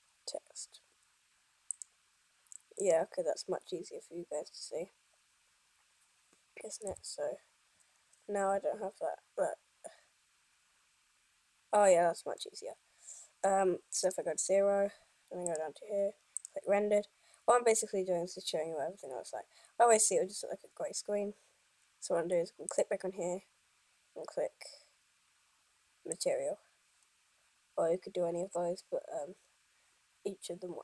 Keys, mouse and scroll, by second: 1.9 click, 3.0 right click, 7.1 n, 9.0 scroll down 1, 9.4-10.1 scroll up 1, 12.3-12.7 scroll up 2, 12.7 middle click, 13.8 scroll down 1, 14.2 KP_0, 15.6 click, 23.0 click.